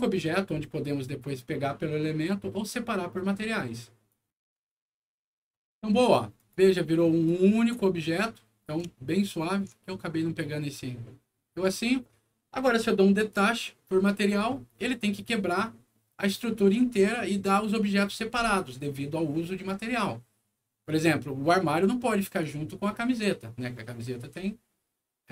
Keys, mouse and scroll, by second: 4.0 click, 5.8 click, 6.3 click, 7.2-8.6 drag, 8.9 alt+middle click, 10.5 alt+scroll up 1, 11.0 alt+middle click, 13.2 click.